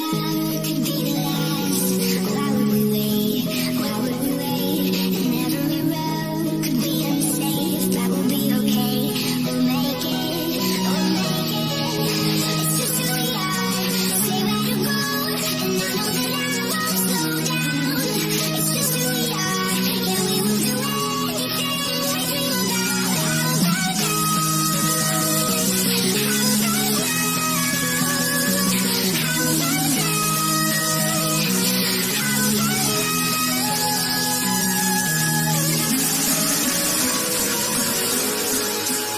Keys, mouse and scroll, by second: 1.8 click, 5.1 click, 12.2 click, 19.1 scroll down 1, 21.8 click, 23.4 scroll down 1, 26.4 click, 27.4 scroll up 1, 31.2 scroll down 1, 32.3-33.3 scroll up 1.